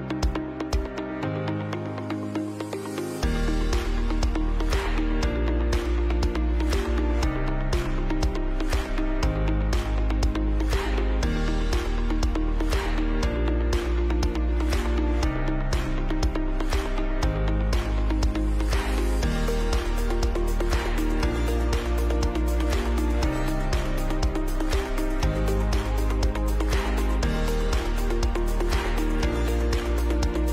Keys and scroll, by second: 0.0-2.3 typing, 14.8 Up, 14.9 Left, 15.0 Left, 22.3 ctrl+b, 23.5 Delete, 24.2 BackSpace, 25.2 Left, 25.3 Left, 25.5 Left, 25.6 Left, 25.7 Left, 26.7 Left, 26.8 Left, 26.8 Left, 27.7 b.